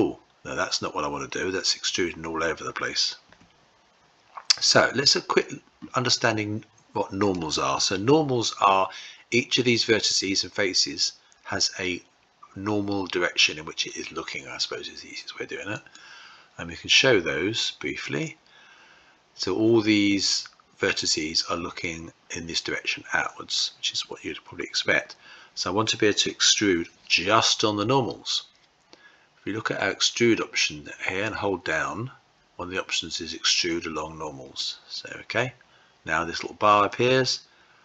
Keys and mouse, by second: 3.2 typing, 15.6-18.5 drag, 31.2-34.5 drag, 36.8-37.8 drag.